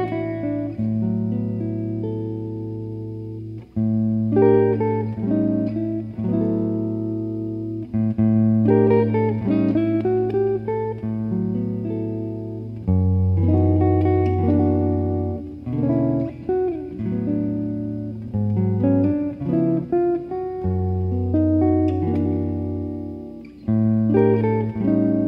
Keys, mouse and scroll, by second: 0.4 click, 3.3 click, 6.8 click, 8.9 click, 12.4 s, 15.3-17.2 middle drag, 17.2 ctrl+r, 23.8-25.2 middle drag, 24.3 z.